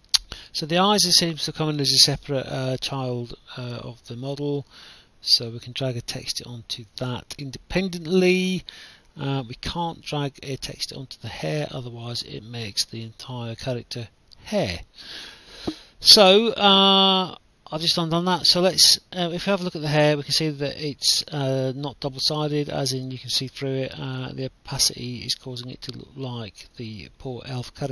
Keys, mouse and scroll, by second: 0.0-2.1 typing, 1.2 right click, 3.5 click, 6.7 right click, 7.7 click, 9.2 right click, 9.9 s, 10.4 w, 10.9 s, 12.5 ctrl+z, 14.6 click, 16.5 click, 16.7 right click, 17.0 a, 17.7 w, 19.2 right click, 21.6 click, 23.1 right click, 24.2 right click, 24.3 a, 24.7 w, 26.2 right click, 26.2 a.